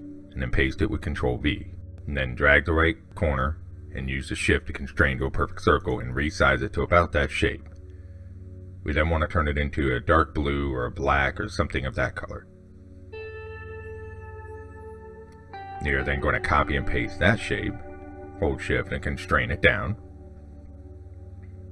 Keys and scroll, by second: 16.1 ctrl+c, 16.7 ctrl+v.